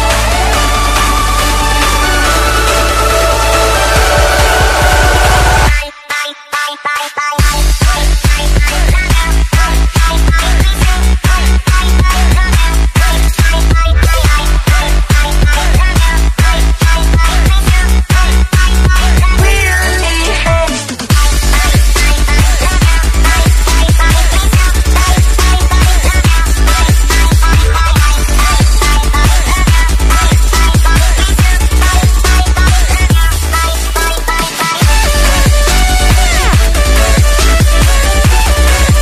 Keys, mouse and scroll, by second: 0.1 click, 2.5 Tab, 2.9 Tab, 4.2 click, 4.5 Tab, 5.4 click, 7.6 alt+Tab, 8.0 alt+Tab, 8.6 click, 9.2 ctrl+v, 10.3 click, 11.4 alt+Tab, 11.9 alt+Tab, 12.7 Tab, 13.3 Tab, 13.7 Tab, 14.3 click, 15.8 Tab, 16.1 click, 17.6 click, 17.9 Tab, 18.9 click, 20.7 Tab, 21.5 click, 22.5 click, 22.9-23.3 alt+scroll down 3, 23.5 alt+scroll up 1, 23.9 click, 25.2-28.3 scroll down 1, 29.3-31.4 scroll down 1, 31.6 click, 33.2 space, 33.5 Down, 34.5 n, 35.7 click, 37.5 click, 38.4 Return.